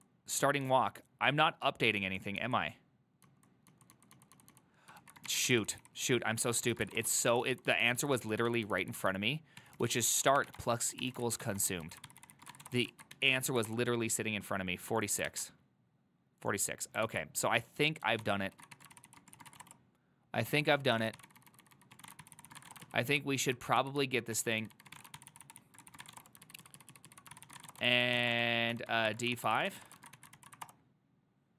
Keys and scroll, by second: 5.1 ctrl+a, 5.1 typing, 5.6 ctrl+c, 5.8 ctrl+c, 5.9 ctrl+c, 6.7-13.2 typing, 13.5 ctrl+c, 13.7 Up, 13.8 Return, 15.4 alt++, 17.2 alt+{, 18.3 ctrl+c, 18.6 ctrl+a, 18.8-31.1 typing, 19.0 ctrl+c, 23.9 ctrl+u, 25.7 ctrl+c, 26.7 ctrl+u, 26.9 ctrl+u, 27.0 ctrl+u.